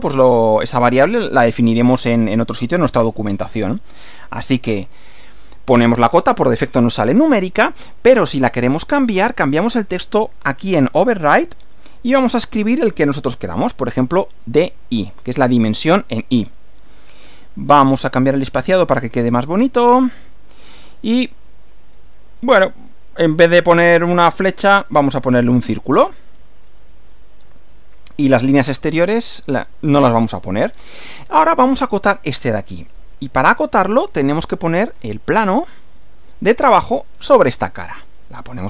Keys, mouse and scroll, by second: 3.9 click, 8.5-9.5 drag, 11.5 click, 14.4 shift+d, 16.9-17.5 drag, 18.0 click, 19.2 1, 19.6 m, 21.7-22.5 drag, 23.6 click, 24.1 click, 25.5 click, 27.4 scroll up 2, 28.4 scroll down 2, 30.7 scroll down 2, 35.4-36.4 middle drag, 37.1 click.